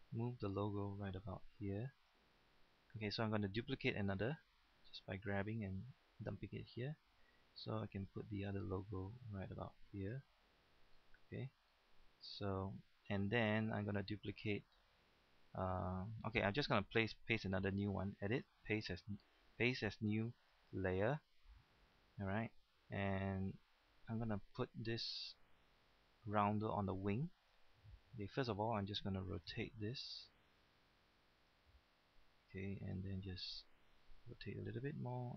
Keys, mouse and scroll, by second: 20.5 click, 32.6 click.